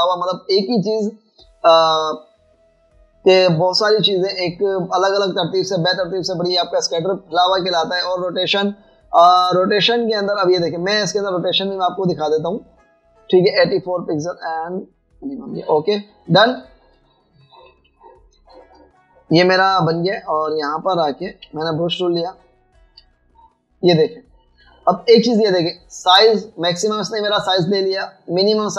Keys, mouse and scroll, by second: 18.0-20.5 typing, 19.7 alt+scroll up 1, 21.2 alt+scroll down 2, 21.5-22.5 typing, 24.0 typing, 25.4-26.1 typing, 26.0 alt+scroll up 1.